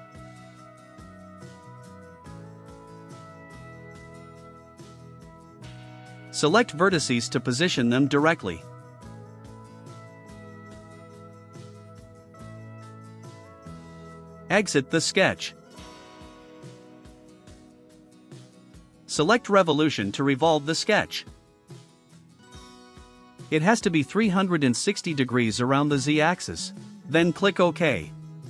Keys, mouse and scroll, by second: 0.1 click, 1.3 Return, 2.4 click, 2.9 click, 3.7 2, 4.2 0, 6.5 click, 7.3 click, 8.0 1, 8.3 4, 8.5 5, 9.0 Return, 10.7 click, 11.7 click, 12.6 5, 13.0 0, 18.6 scroll down 1, 19.0 right click, 19.6 middle click, 19.6 scroll down 2, 24.4 middle drag, 24.8 scroll down 2, 25.1 right click, 28.2 click.